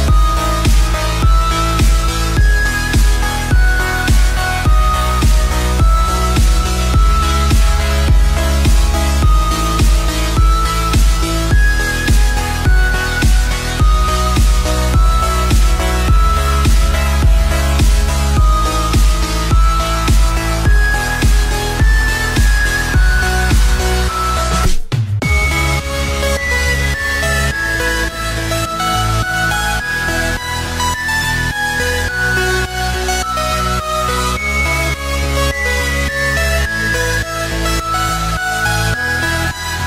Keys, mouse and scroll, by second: 1.2 click, 2.6-5.0 drag, 5.0-5.6 scroll down 1, 5.8 click, 6.5-7.5 scroll down 2, 7.5-9.5 drag, 9.5 KP_1, 10.1-10.9 scroll up 10, 11.9-12.3 scroll up 3, 12.3-13.5 shift+middle drag, 13.5-15.7 drag, 16.0 scroll down 1, 16.6-17.4 scroll down 9, 17.4-17.8 scroll up 4, 17.8-18.9 middle drag, 18.9 scroll down 1, 19.3-20.4 middle drag, 20.4 KP_3, 21.2-22.2 scroll up 3, 22.2 shift+middle click, 22.8-23.5 scroll up 4, 23.5 click, 29.5-31.8 drag, 35.2-37.0 drag, 38.2-39.7 drag.